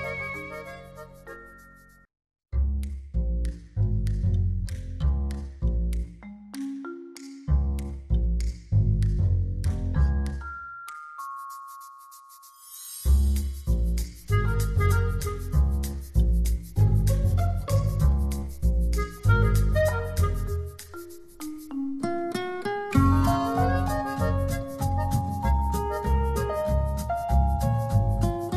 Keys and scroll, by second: 16.7 space, 19.6 space, 21.4 space.